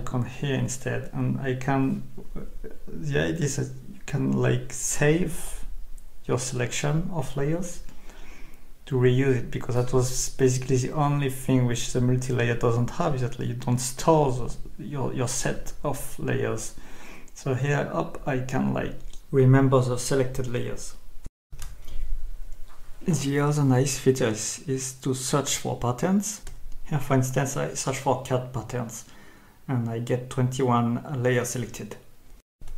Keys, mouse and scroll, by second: 0.0 click, 1.5-5.6 typing, 6.5 click, 7.4 Escape, 9.3 click, 9.9 click, 11.5 click, 14.3 click, 15.9 Escape, 17.0 click, 17.9 click, 19.3 click, 23.9 click, 28.1 c, 28.6 a, 28.9 t, 30.3 Escape.